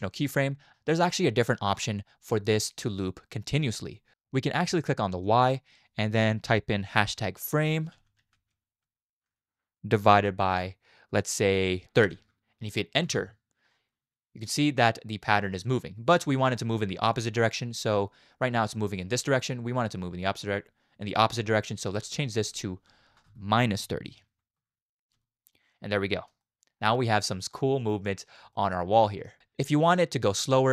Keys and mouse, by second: 5.4-13.1 drag, 11.8 BackSpace, 13.9 space, 16.1 space, 21.9-24.6 drag, 23.2 BackSpace, 25.1 space, 26.4 shift+middle click, 27.5-28.2 middle drag, 28.5-29.3 shift+middle drag, 29.4 space.